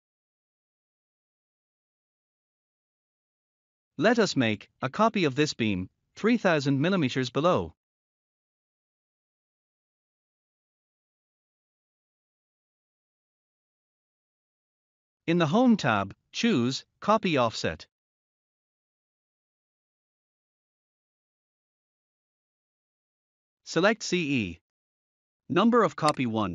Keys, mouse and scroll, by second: 3.6 scroll up 1, 14.9 click, 21.9 click, 26.0 click.